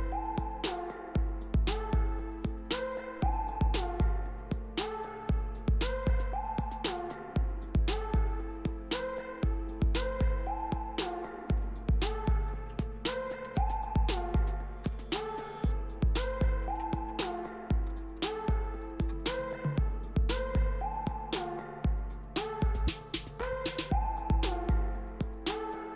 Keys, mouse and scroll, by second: 1.4 right click, 2.6 click, 6.0 click, 7.3 right click, 8.4 click, 9.8 Right, 10.3 Left, 10.8-11.4 Left, 11.6 Right, 12.2-13.5 typing, 14.9 Return, 22.5 click, 25.4-25.9 drag.